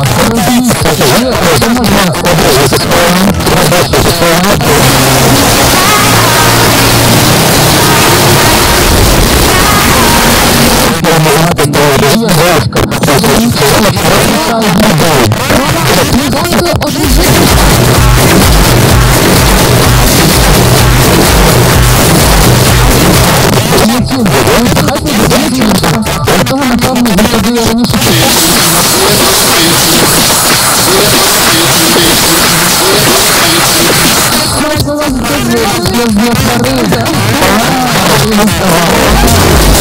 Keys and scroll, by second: 10.7 Page_Down, 23.2 Page_Down, 34.4 Page_Down.